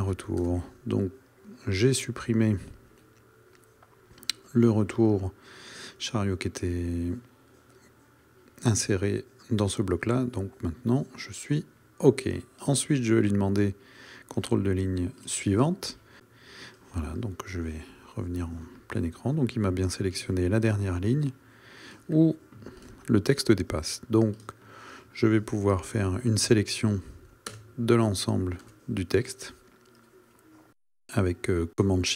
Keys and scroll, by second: 0.4 Delete, 27.5 BackSpace, 28.7 BackSpace.